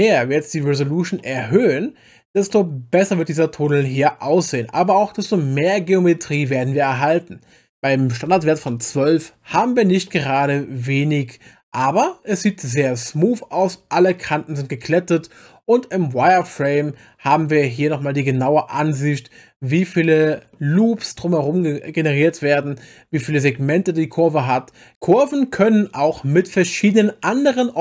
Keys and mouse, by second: 1.2 middle click, 2.5 middle click, 6.5-8.6 drag, 10.1-11.5 middle drag, 17.9-20.5 middle drag.